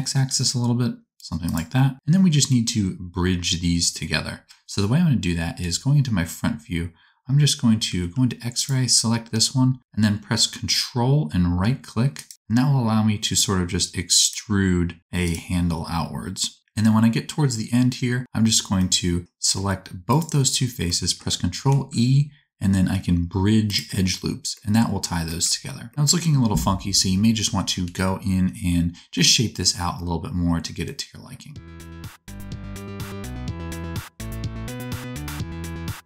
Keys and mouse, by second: 5.5 KP_1, 7.9 alt+z, 8.5 click, 12.1 ctrl+click, 14.1 ctrl+click, 15.2 ctrl+click, 21.6 ctrl+e, 25.5 alt+z, 27.8 KP_1, 31.6-35.2 typing, 31.7 alt+z, 32.1 alt+a, 32.4 alt+a, 32.4-33.4 drag, 32.8 alt+a, 33.6 alt+a, 33.6 click, 33.8 alt+a, 34.4 alt+a, 34.6-35.7 drag.